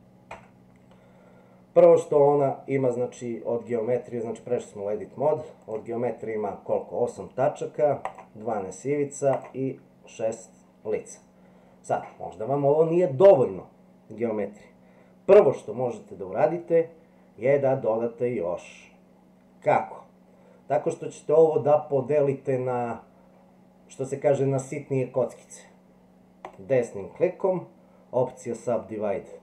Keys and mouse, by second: 0.3 Tab, 5.6 click, 8.1 click, 9.3 click, 26.5-29.4 right drag.